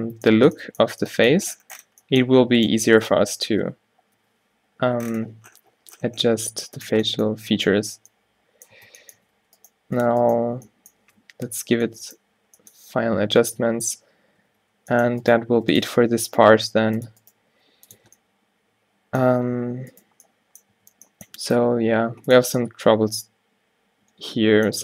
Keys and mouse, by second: 0.5 Tab, 4.3 o, 4.8 g, 7.0 Tab, 8.9 Tab, 9.3 a, 9.5 b, 10.5 click, 10.5 q, 11.8 ctrl+t, 13.5 ctrl+z, 14.6 ctrl+z, 16.5 g, 17.6 g, 18.0 Tab, 19.4 Tab, 20.8 q, 21.4 g, 22.5 Tab.